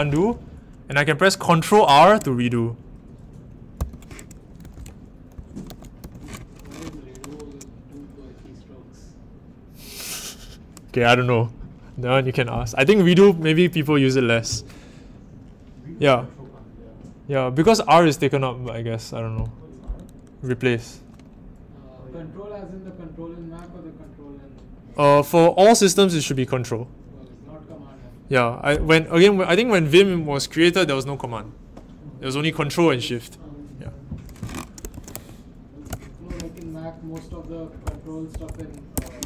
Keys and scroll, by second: 1.8 ctrl+r, 3.7 u, 4.6 ctrl+r, 5.3 u, 5.6 ctrl+r, 35.8 Return, 37.8 Home, 38.3 BackSpace, 38.9 Page_Up.